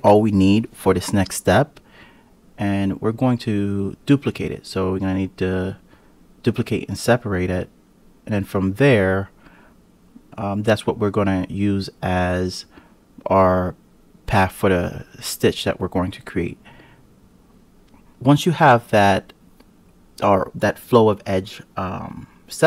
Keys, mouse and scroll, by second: 3.8 click, 5.1 click, 6.6 shift+click, 7.5 KP_Divide, 8.1-8.4 scroll up 2, 8.4 click, 9.1 click, 10.4 g, 13.7 Tab, 14.7-15.5 scroll down 1, 15.5 1, 15.9 click, 16.7 KP_Decimal, 17.5 click, 20.4 x, 21.5-21.8 scroll down 1, 21.8 scroll up 6, 22.1-22.6 scroll down 11.